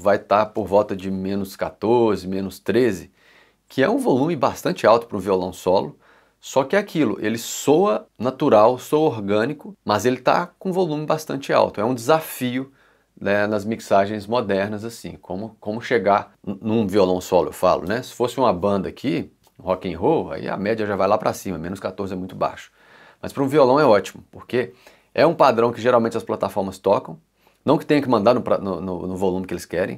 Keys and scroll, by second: 0.5 c.